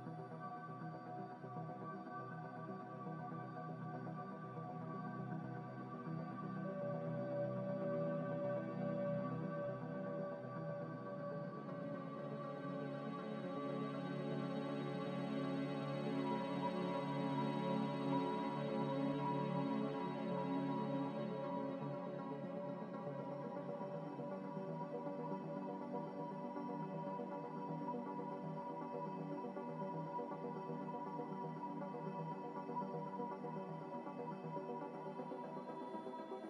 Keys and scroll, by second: 0.4 Delete, 1.0 Delete, 1.4 Delete, 2.0 Delete, 2.4 Delete, 3.2 Delete, 3.6 Delete, 4.6 Delete, 5.0 Delete, 5.4 Delete, 6.7 z, 13.6 Return, 15.5 a, 18.4 z, 19.2 Delete, 21.6 Delete, 24.3 Delete, 26.1 Delete, 26.3 Delete, 27.1 Delete, 27.3 Delete, 28.7 Delete, 29.3 Delete, 29.5 Delete, 29.9 Delete, 31.5 Delete.